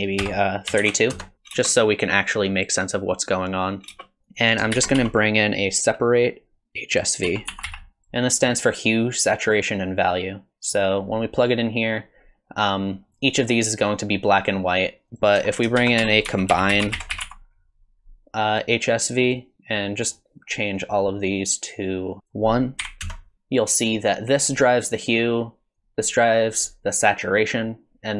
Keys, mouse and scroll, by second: 1.5 space, 3.9 space, 4.2 middle click, 4.2 scroll down 3, 4.3 click, 4.7 shift+a, 10.2 click, 15.1 click, 15.8 shift+a, 19.7 click, 21.0 click, 22.1 click, 22.2 click, 23.3 click, 25.7 click.